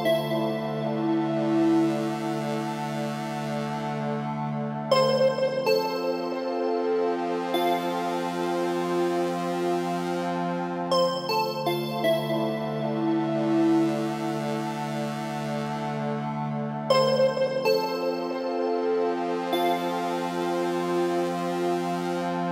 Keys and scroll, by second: 5.5 Down, 12.9 Right, 18.1 Right, 21.0 Up.